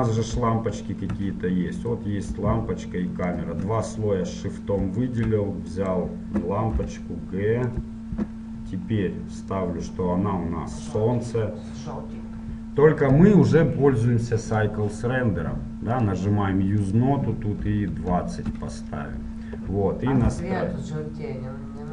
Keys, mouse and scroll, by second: 0.5-6.0 drag, 6.0-7.9 right drag, 6.9 g, 11.1-20.5 drag, 20.5 r.